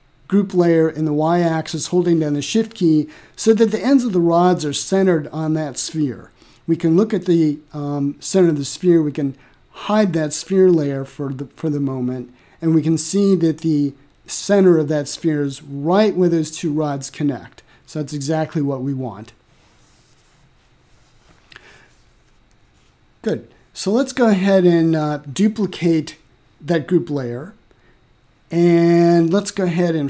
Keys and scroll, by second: 28.3 Return.